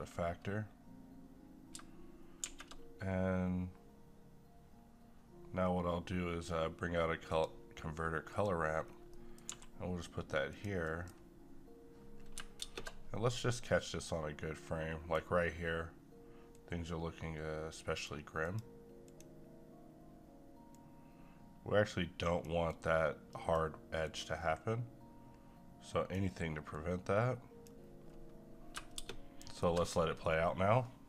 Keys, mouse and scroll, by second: 2.5 shift+a, 7.3 click, 8.8 scroll down 1, 9.1 middle click, 9.5 g, 10.5 click, 10.8 middle click, 12.6 space, 13.7-16.5 right drag, 16.5-24.0 drag, 24.2 q, 26.7-29.0 drag, 29.0 space.